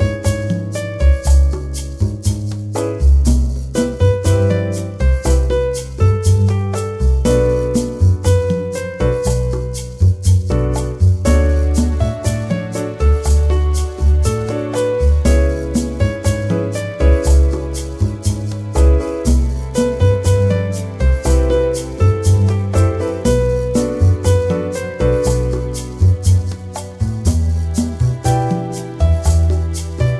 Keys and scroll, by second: 29.0 1, 29.6 0.